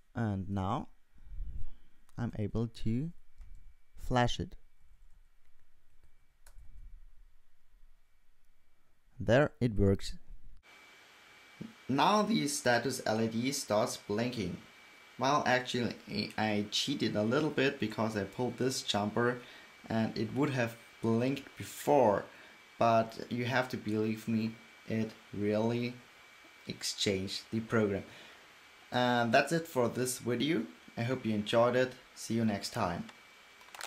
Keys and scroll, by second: 1.8-6.6 typing, 8.3-9.1 typing.